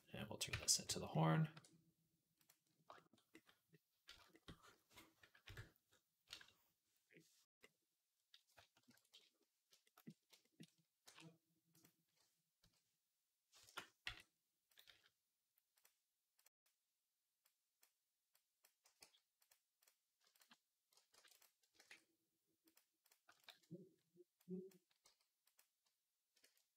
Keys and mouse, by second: 0.3 Tab, 0.7 a, 1.4 e, 3.7-8.3 middle drag, 5.3 KP_1, 8.7 ctrl+KP_1, 10.9-15.6 middle drag, 10.9 e, 12.5 ,, 15.6 click, 15.6 m, 16.3-17.3 middle drag, 17.3 click, 17.6 middle click, 18.2-19.4 drag, 18.9 g, 19.4 middle click, 20.2 alt+shift+click, 20.3-23.3 alt+middle drag, 21.0 ctrl+r, 21.7 alt+s, 23.3 alt+shift+click, 24.3-25.4 drag, 24.9 g.